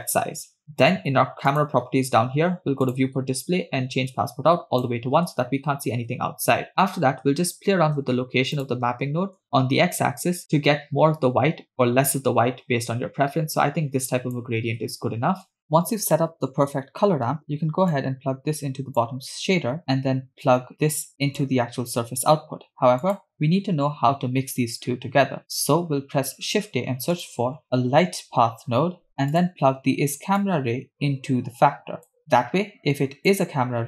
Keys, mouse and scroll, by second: 1.5 click, 2.9 click, 3.2 scroll down 2, 4.1 click, 8.6 click, 9.4-14.5 shift+drag, 15.6 middle click, 17.9-19.1 drag, 19.8 middle click, 19.8 scroll down 1, 21.0-22.7 drag, 23.0 click, 25.4 scroll down 2, 26.6 shift+a, 30.4-33.3 drag.